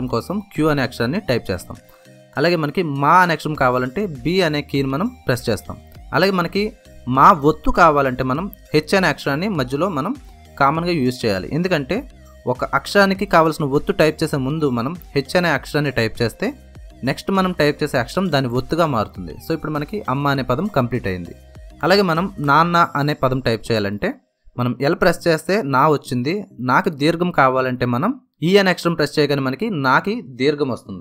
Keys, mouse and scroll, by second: 2.2 b, 7.5 h, 17.2 b, 19.7 space, 19.9 space, 24.6 l, 26.7 typing, 27.9 typing.